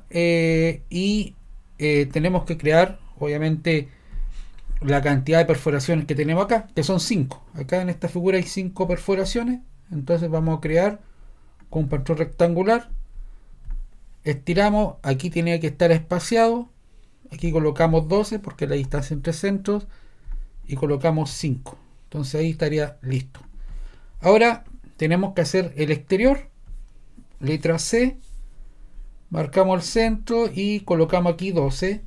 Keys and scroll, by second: 18.5-19.4 typing, 21.3 5, 28.0 c, 31.5-32.0 typing.